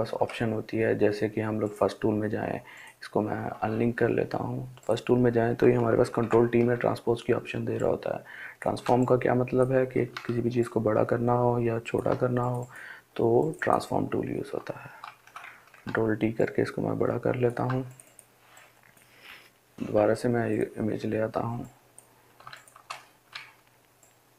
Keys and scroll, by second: 5.4 ctrl+t, 14.5 ctrl+t, 19.8 Delete.